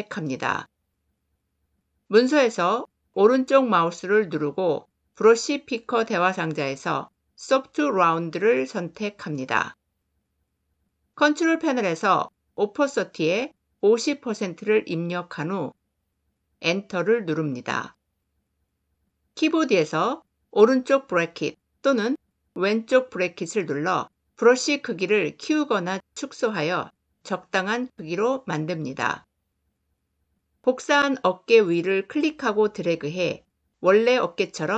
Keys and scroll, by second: 16.5 Return.